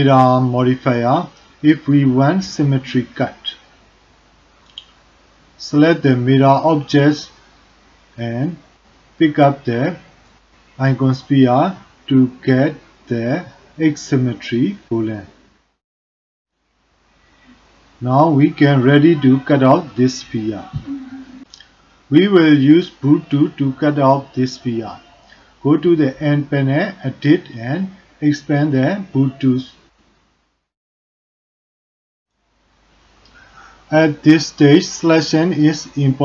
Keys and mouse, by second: 1.0-3.4 drag, 8.6 click, 16.1 click, 17.0 click, 21.3 click, 21.8-22.9 middle drag, 25.0 click, 26.6 click.